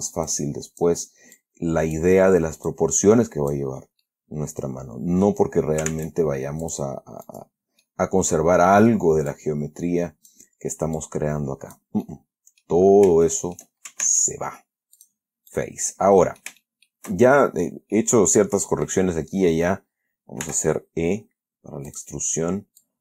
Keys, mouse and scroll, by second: 0.6 click, 1.7 click, 3.0-4.0 drag, 4.3-5.8 middle drag, 6.2 ctrl+Tab, 6.9 click, 7.6 right click, 8.1-9.4 middle drag, 9.6-10.8 drag, 11.3-12.3 drag, 12.4 middle click, 13.6 shift+middle click, 14.3 ctrl+shift+Tab, 15.3 click, 15.8 right click, 16.2 middle click, 16.7 scroll down 1, 16.9 shift+right click, 18.3-19.4 drag, 20.7 middle click, 20.7 e, 22.2 click.